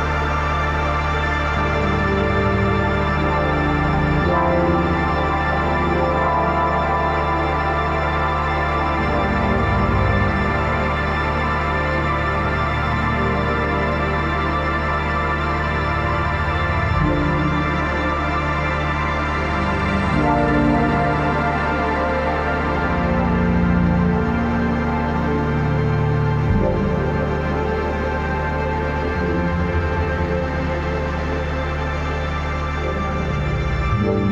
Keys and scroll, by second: 0.6 ctrl+t, 13.3 Up, 14.9 Down, 16.1 Up, 17.0 Caps_Lock, 25.3 ctrl+j.